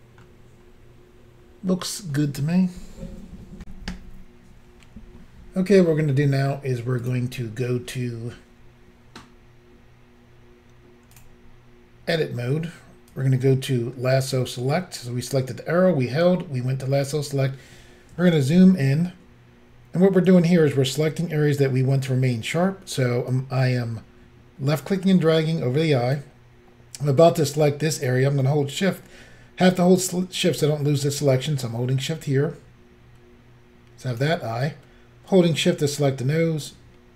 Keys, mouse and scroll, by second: 0.6 scroll down 2, 1.4 scroll down 1, 3.6 Insert, 7.0 click, 7.1 click, 11.1 click, 11.2 click, 13.1 click, 17.2 scroll up 3, 18.2 shift+middle click, 23.3 click, 31.5 shift+click, 35.3 shift+click.